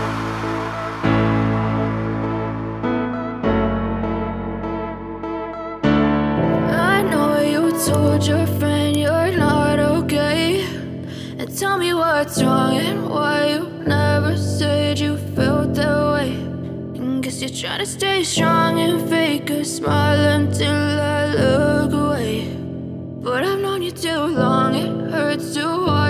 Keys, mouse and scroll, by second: 0.3 click, 0.5 double click, 1.3 ctrl+o, 2.2 scroll down 1, 5.2 click, 10.5 right click, 11.9 click, 13.0 ctrl+click, 14.8 ctrl+shift+click, 17.2 click, 18.9 shift+click, 19.7 click, 19.9 double click, 20.7 click, 23.5 click.